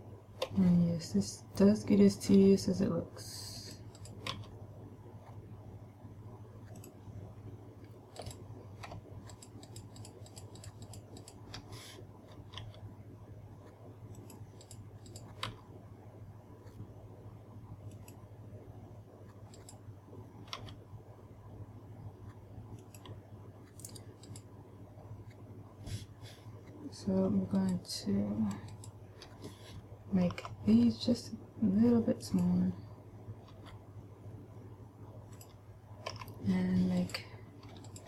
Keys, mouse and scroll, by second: 1.0 g, 4.3 click, 4.8 g, 7.4 click, 8.7 right click, 9.8 shift+right click, 10.3 shift+right click, 10.8 shift+right click, 11.1 shift+right click, 11.3 shift+right click, 11.7 shift+right click, 13.2 g, 14.8 click, 15.2 right click, 15.5 right click, 16.0 g, 18.6 click, 20.1 right click, 21.2 g, 23.6 click, 24.8 right click, 28.1 shift+right click, 29.3 shift+right click, 30.8 s, 32.9 click, 34.1 g, 35.9 click, 36.7 a, 37.4 right click.